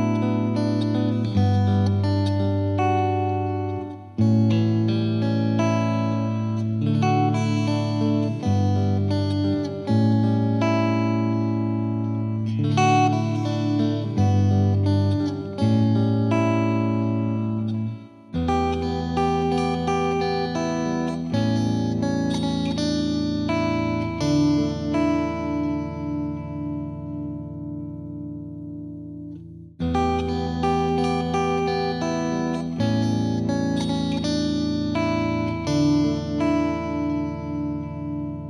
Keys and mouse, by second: 0.0 click, 0.6 click, 1.0 click, 1.1 click, 1.7 click, 1.7 click, 2.7 click, 3.4 click, 3.5 click, 4.2 click, 4.2 click, 5.4 click, 5.5 click, 5.9 click, 5.9 click, 6.4 click, 9.1 click, 9.5 click, 9.9 click, 10.8 click, 11.5 click, 11.8 click, 12.5 click, 13.2 click, 15.1 click, 15.6 click, 16.5 click, 17.8 click, 19.6 click, 20.9 click, 21.4 click, 22.2 click, 24.2 click, 24.8 click, 25.7 click, 28.5 click, 31.3 click, 32.2 click, 32.3 ctrl+z, 33.3 click, 34.0 click, 34.7 click, 35.7 click, 35.8 click, 36.1 click, 36.2 click, 36.7 click, 36.8 click, 37.2 click, 37.3 click, 37.5 click, 37.8 click, 38.2 click.